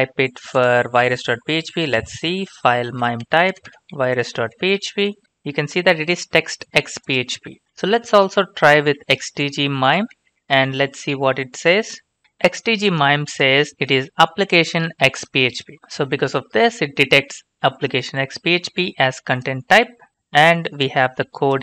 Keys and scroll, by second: 0.0 alt+Tab, 1.6-4.5 typing, 2.9 Right, 7.6 alt+Tab, 8.7-9.0 typing, 9.8 Right, 10.3-12.2 typing, 12.2 Return, 16.5 alt+Tab.